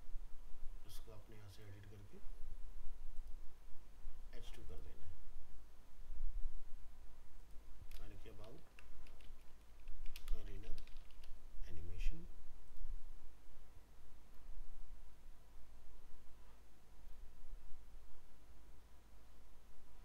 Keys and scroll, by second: 8.5 ctrl+shift+Left.